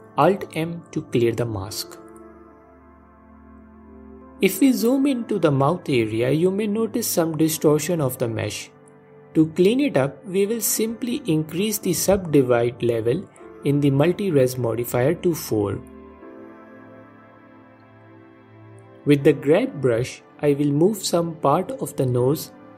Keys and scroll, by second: 6.6 alt+m.